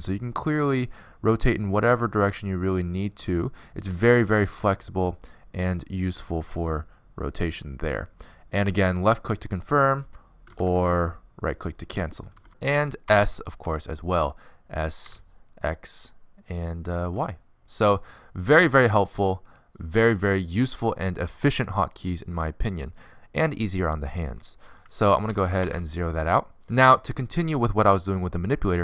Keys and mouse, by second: 11.3 r, 14.5 s, 16.8 alt+r, 17.2 s, 19.2 s, 20.8 s, 26.5 alt+r, 26.6 alt+g, 28.1 alt+s.